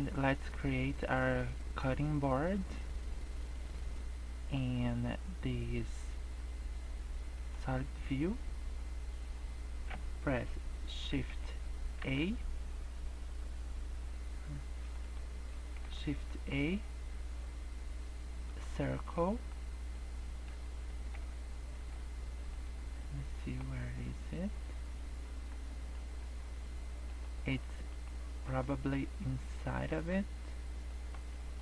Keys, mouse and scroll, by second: 15.8 shift+a, 19.2 scroll up 2, 19.4-19.8 scroll down 9, 19.9 middle click, 20.6 scroll down 2, 20.8 middle click, 21.7 z, 22.9 middle click, 23.6 scroll up 2, 23.8-25.1 scroll down 21, 25.2-26.6 scroll up 27, 27.0 click, 28.0 click, 28.4 click, 29.1 middle click, 30.7-31.5 scroll down 7, 30.9 middle click, 31.5 middle click.